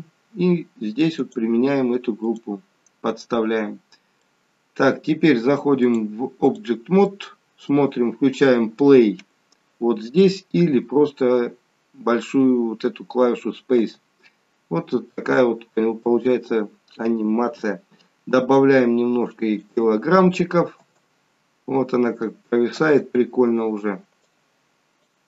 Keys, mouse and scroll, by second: 1.2 click, 3.4 scroll up 4, 4.2 middle click, 5.9 click, 7.0 middle click, 7.0 scroll up 1, 13.6 space, 15.1 space, 18.4 click, 20.7 space, 22.7 space, 24.1 click.